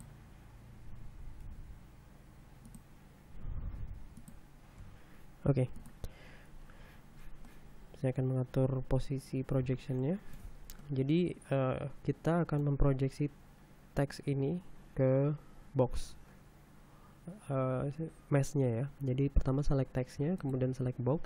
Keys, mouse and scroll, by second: 0.6 click, 2.1 g, 3.3 click, 4.0 s, 4.8 click, 5.5 g, 6.4 click, 8.1-11.2 middle drag, 11.5-13.5 shift+middle drag, 21.1 shift+right click.